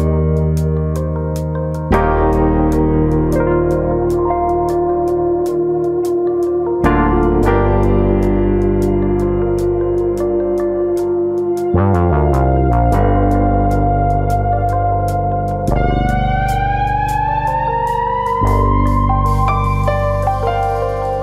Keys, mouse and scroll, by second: 0.8 shift+click, 1.5 shift+click, 2.0 right click, 4.9 click, 5.6 click, 6.1 shift+click, 7.0 shift+click, 7.0 j, 7.5 click, 8.1 shift+click, 9.2 j, 9.9 click, 10.4 shift+click, 10.7 middle click, 11.0 middle click, 12.0 click, 12.9 alt+click, 14.4 click, 14.6 middle click, 15.0 middle click, 15.3 click, 15.9 click, 17.5 click, 17.9 ctrl+click, 18.2 ctrl+click, 18.2 middle click, 18.7 click, 19.5 middle click, 20.2 middle click, 20.7 click.